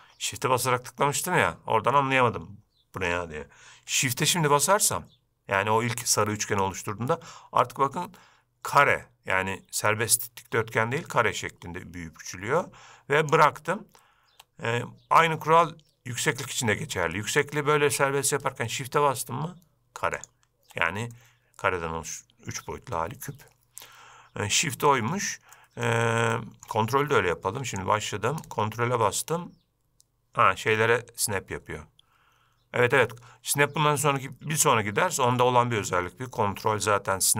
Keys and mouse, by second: 21.3-22.0 middle drag, 22.0 drag, 22.2-23.2 middle drag, 23.2 drag, 23.3-24.9 middle drag, 25.7-26.0 middle drag, 26.4-26.8 shift+middle drag, 27.9-37.3 drag.